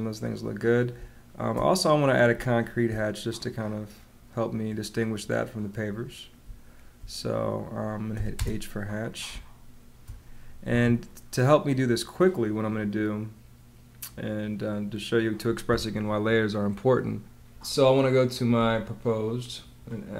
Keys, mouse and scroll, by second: 0.9 space, 2.2 space, 6.5 space, 8.1 h, 8.3 space, 10.6 Escape.